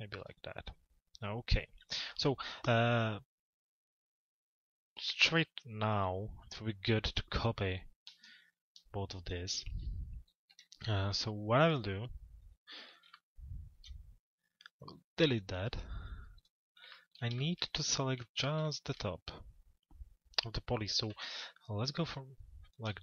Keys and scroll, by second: 9.9 t, 12.4 p, 20.8 f.